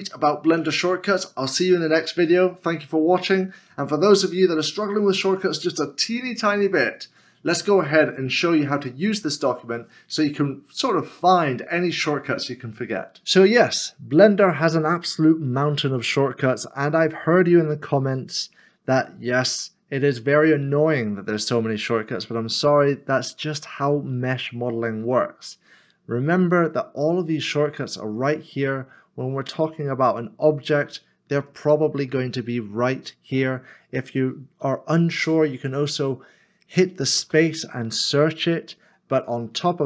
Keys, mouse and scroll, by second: 18.6 scroll up 1, 18.7 middle click, 37.2 space.